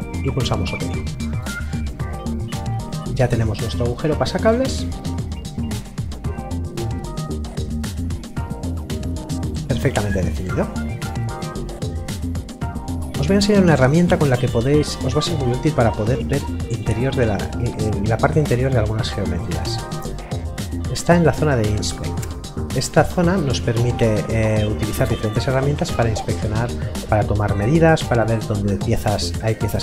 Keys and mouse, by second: 2.1 middle click, 14.3 middle click, 21.7 click.